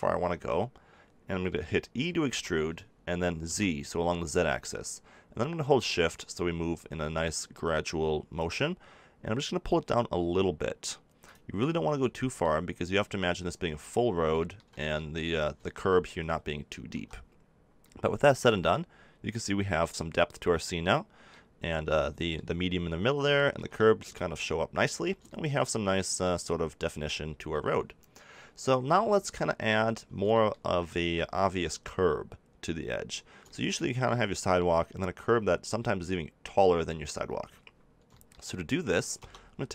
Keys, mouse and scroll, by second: 2.2 e, 11.3 click, 11.8 middle click, 12.2 click, 13.0-15.3 middle drag, 16.7 a, 16.9 Tab, 19.6 middle click, 20.7-22.1 middle drag, 23.5-28.8 middle drag, 28.8 KP_7, 30.3 middle click, 30.9 z, 32.7 middle click, 33.7 middle click, 35.1-36.5 middle drag, 39.1 Tab.